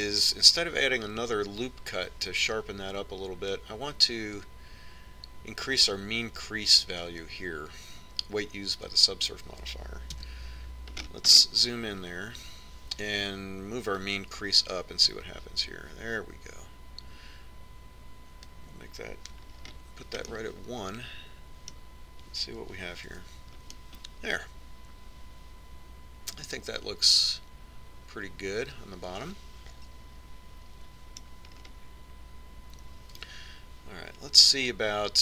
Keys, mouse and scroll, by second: 0.3-2.7 drag, 11.2 KP_Decimal, 12.0 middle click, 15.0-16.9 drag, 20.6-23.1 middle drag, 24.2 Tab, 24.9-26.7 middle drag, 32.7-34.8 middle drag, 34.4 Tab.